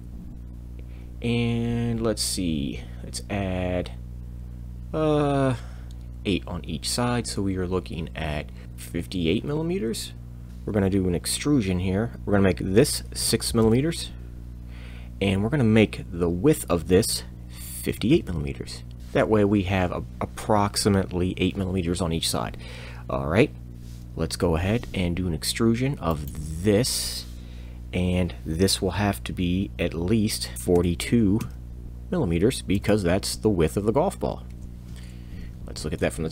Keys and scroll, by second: 10.5 Escape, 10.5 BackSpace, 10.5 m, 10.5 8, 10.5 5, 12.1 BackSpace, 13.2 6, 13.5 m, 17.6 5, 17.9 8, 18.1 m, 19.0 Return, 19.0 Tab, 24.4 e, 30.7 4, 31.4 2, 34.5 Return.